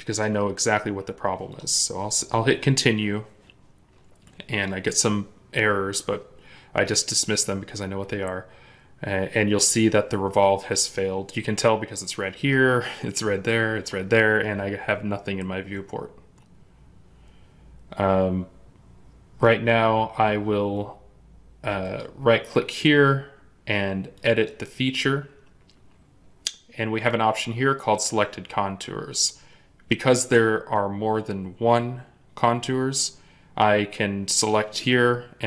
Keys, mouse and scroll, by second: 21.7 right click.